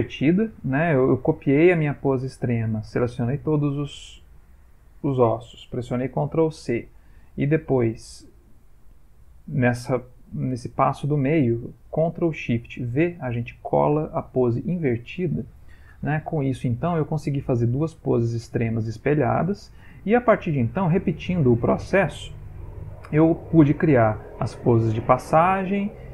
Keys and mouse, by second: 1.8 click, 3.4 a, 6.7 ctrl+c, 8.6 click, 16.9 click.